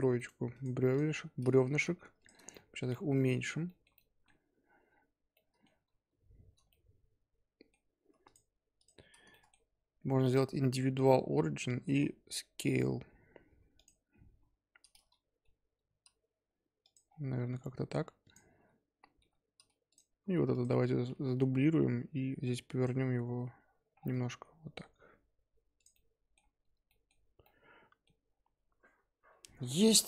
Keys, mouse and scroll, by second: 0.5 click, 0.9 click, 1.1 g, 2.5-3.3 shift+middle drag, 3.3-3.6 scroll up 2, 3.6-4.9 shift+middle drag, 4.9-5.3 scroll up 1, 5.3-6.6 middle drag, 6.6 scroll down 1, 6.7-8.2 middle drag, 8.2 shift+click, 8.7 shift+click, 9.3-10.3 middle drag, 10.3-11.9 drag, 11.9 s, 14.2 KP_7, 14.7-15.4 scroll up 5, 15.4 g, 17.0-18.2 scroll down 5, 18.2 click, 19.2 g, 20.5 click, 21.1 shift+d, 23.9-24.3 scroll down 3, 24.3 r, 25.9-26.4 middle drag, 26.4-26.8 scroll up 3, 26.8-28.2 middle drag, 28.2 scroll down 3, 28.5-29.5 scroll up 2, 29.5-30.0 scroll up 1.